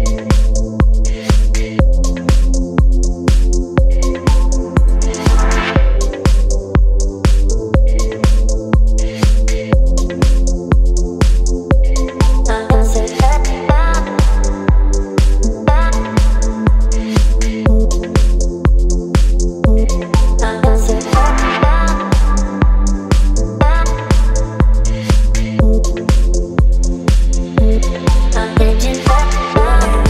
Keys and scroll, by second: 1.3 Return, 3.9 space, 21.7 space, 26.8 space.